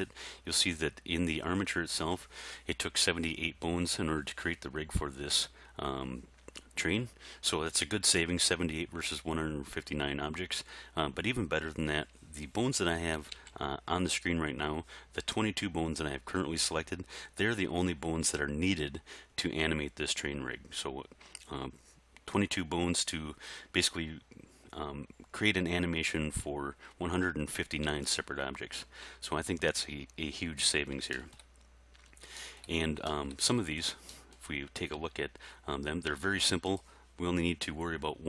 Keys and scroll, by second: 13.0 a, 35.0 r.